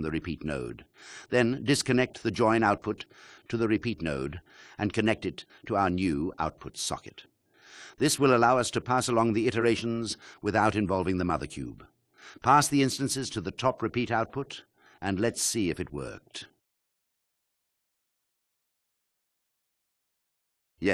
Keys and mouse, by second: 2.8 click, 6.3-12.9 drag, 15.6 shift+click, 16.3 click, 20.1 click.